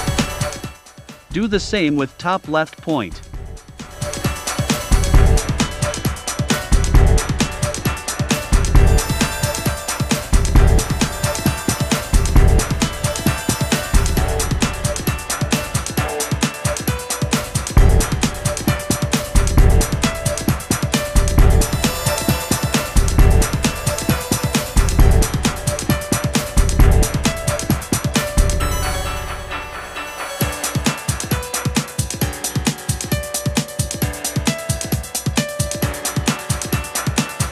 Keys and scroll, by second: 1.6 v, 3.8 i, 5.6 v, 6.4 a, 7.8 Left, 10.3 Right, 11.3 v, 23.8 v.